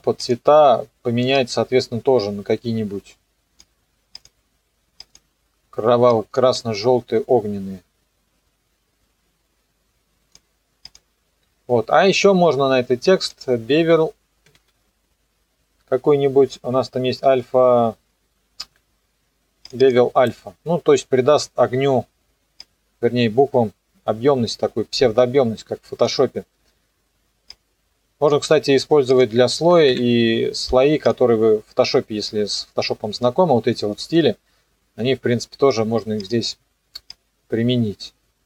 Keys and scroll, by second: 14.3 b, 14.6 e, 29.7 KP_3, 29.9 KP_Enter.